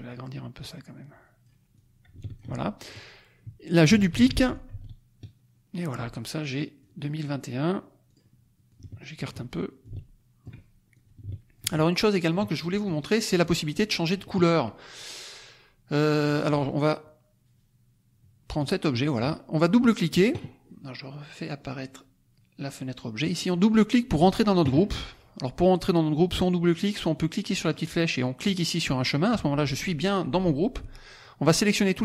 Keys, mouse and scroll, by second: 0.0 click, 1.7 click, 4.1 ctrl+d, 4.6 ctrl+click, 6.7 click, 8.0 click, 8.6 click, 9.8 ctrl+click, 10.9 ctrl+click, 11.9 ctrl+middle click, 12.5 ctrl+middle click, 13.5 click, 13.7 middle click, 18.6 click, 18.9 middle click, 21.6 click, 23.2 middle click, 27.6 click, 31.2-32.0 drag.